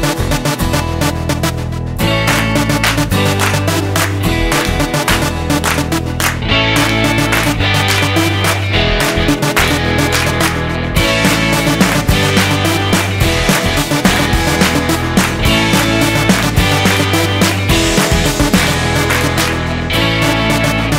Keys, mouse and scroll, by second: 0.4 click, 3.7 click, 5.9 click.